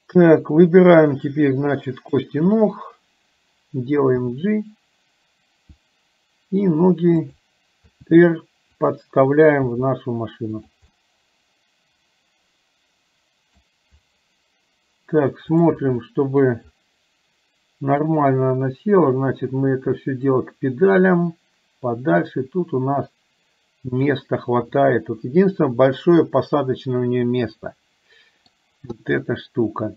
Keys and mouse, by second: 1.8 click, 9.7 g, 11.0-13.6 middle drag, 15.6 click, 16.1 middle click, 18.5-24.5 drag, 24.7-28.6 middle drag, 29.3-29.9 middle drag.